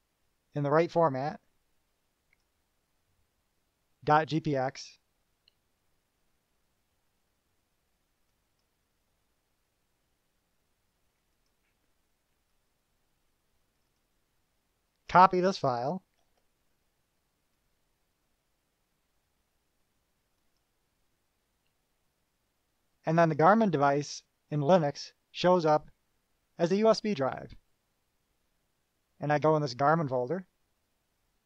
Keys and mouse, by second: 8.5 click, 11.5 click, 12.7 click, 14.0 click, 14.7 click, 15.2 click, 16.7 ctrl+c, 17.7 click, 20.6 click, 30.0 click.